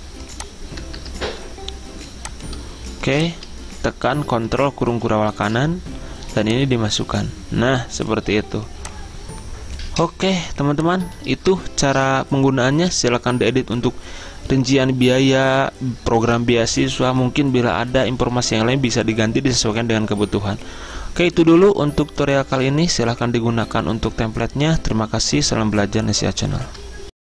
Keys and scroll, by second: 1.2 Return, 5.1 ctrl+shift+], 10.5 z.